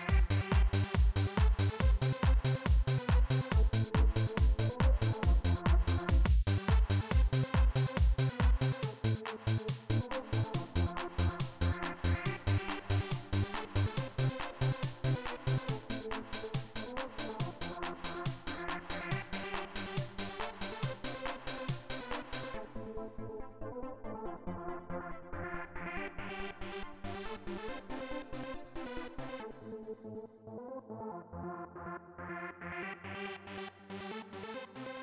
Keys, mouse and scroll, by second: 1.4 click, 4.2-5.5 drag, 6.0 click, 6.5 click, 9.3 click, 10.4 click, 14.3 click, 15.7 click, 17.7 click, 18.6 click, 20.5-21.7 drag, 22.8 click, 25.3-31.0 drag, 31.9 click.